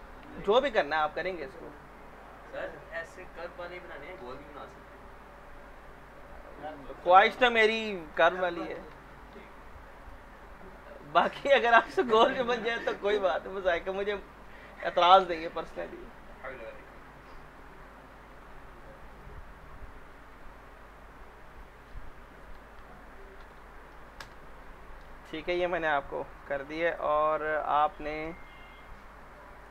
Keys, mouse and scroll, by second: 0.9 click, 4.0-5.1 typing, 7.3-9.4 typing, 10.0 click, 14.7-18.2 drag, 19.1 click, 21.5 click, 23.4 ctrl+v, 24.2 Return, 26.9 click, 27.8-29.6 scroll down 1.